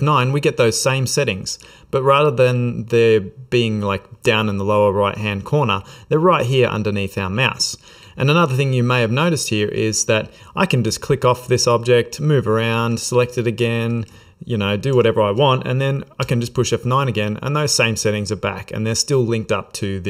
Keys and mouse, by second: 5.2 F9, 10.3 click, 11.0 click, 11.5 click, 11.8 shift+middle click, 12.3 middle click, 13.1 click, 13.4 shift+middle click, 13.5 shift+middle click, 14.2 ctrl+middle click, 14.7 ctrl+middle click, 15.2 shift+middle click, 16.3 F9.